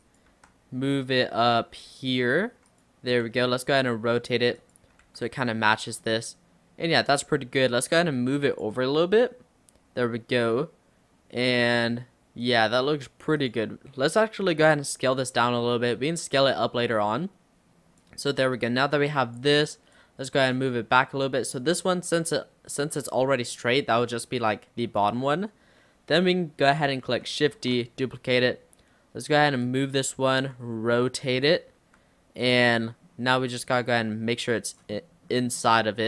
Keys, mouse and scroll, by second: 0.4 d, 1.6 g, 3.3 r, 5.1 g, 6.1-7.1 middle drag, 7.1-7.6 scroll up 2, 7.9 click, 12.5 click, 13.4 click, 14.6 click, 15.3 s, 16.6-18.1 middle drag, 18.1 click, 20.0 click, 20.8-24.9 middle drag, 24.9 click, 27.6 shift+d, 30.4 r, 31.8 g, 32.8-33.8 middle drag, 33.8 click, 35.0-36.0 middle drag.